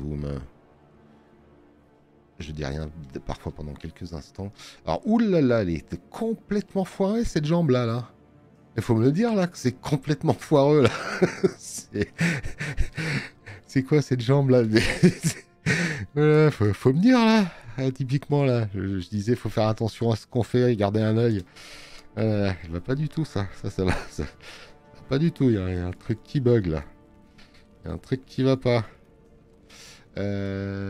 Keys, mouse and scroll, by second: 18.0 space, 18.2 click.